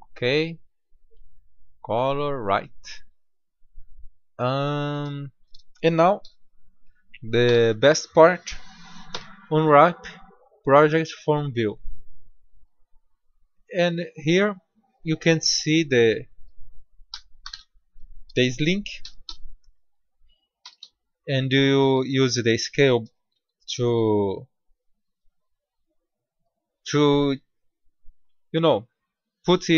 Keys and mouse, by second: 0.3-3.0 drag, 6.1 KP_7, 7.4 Tab, 9.0 u, 13.9-14.4 drag, 14.8-16.6 drag, 17.0 r, 18.9 s, 20.6 s, 23.3 g.